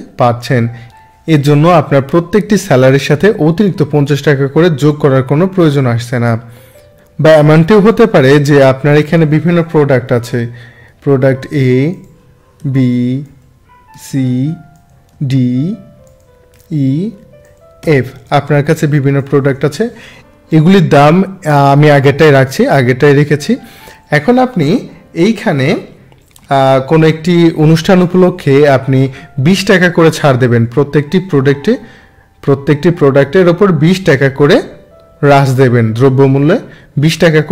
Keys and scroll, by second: 10.9 a, 12.6 b, 13.9 c, 16.5 e, 17.8 f, 26.4 Delete.